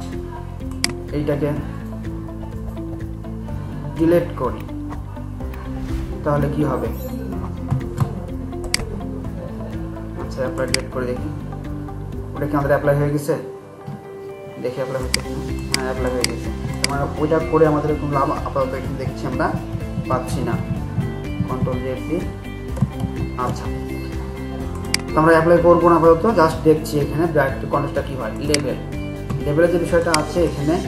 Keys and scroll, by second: 19.5 ctrl+z, 20.0 ctrl+z, 20.3 ctrl+z, 20.5 ctrl+z, 20.7 ctrl+z, 21.0 ctrl+z, 21.4 ctrl+z, 21.6 ctrl+z, 23.0 ctrl+shift+z.